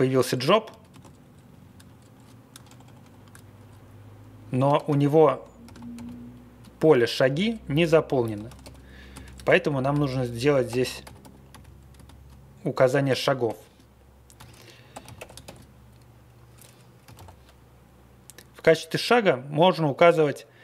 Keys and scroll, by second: 0.0 Up, 0.2 Up, 0.7 ctrl+a, 0.9 ctrl+space, 1.0 Down, 1.2 Down, 1.4 Down, 1.5 Down, 1.6 ctrl+space, 1.8 Down, 1.9 Down, 2.1 Down, 2.6 super+=, 2.8 super+=, 3.6 Down, 3.8 Down, 4.5 Up, 4.7 ctrl+g, 5.6 ctrl+c, 8.4 ctrl+x, 9.4 ctrl+;, 10.1-12.0 typing, 13.4-17.6 typing.